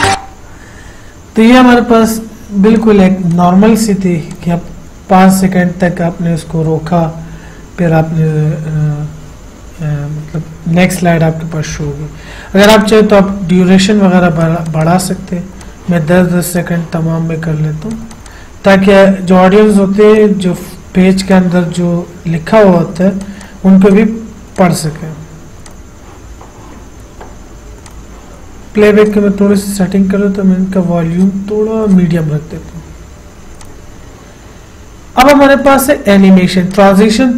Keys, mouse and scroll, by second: 3.0 click, 13.1 click, 28.2 click, 31.5 click, 36.0 click.